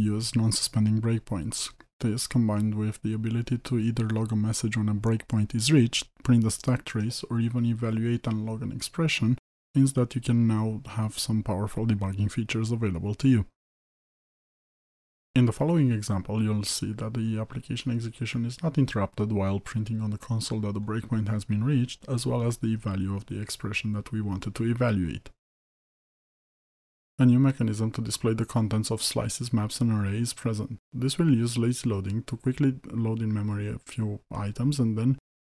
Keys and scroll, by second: 0.4 ctrl+F8.